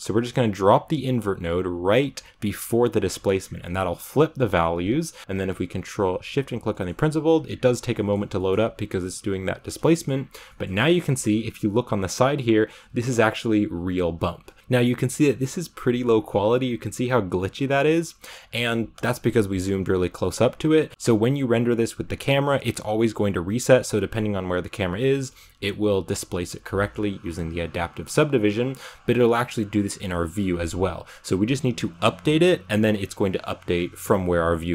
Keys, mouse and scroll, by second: 4.3 click, 5.0 middle click, 5.1 scroll down 3, 5.2 ctrl+shift+click, 6.6-9.1 middle drag, 9.1-10.1 scroll up 2, 9.9 shift+middle click, 10.3-12.8 middle drag, 12.8-14.5 scroll up 1, 14.5-34.7 shift+middle drag.